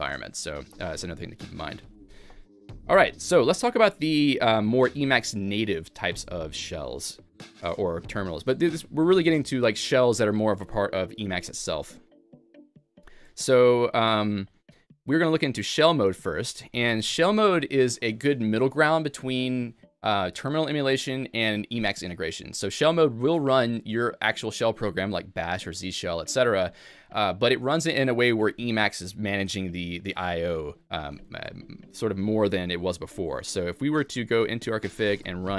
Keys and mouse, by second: 2.6-3.3 typing, 2.8 click, 31.3-32.0 typing, 31.5 click, 34.1-34.9 typing, 34.4 click, 35.3 alt+x.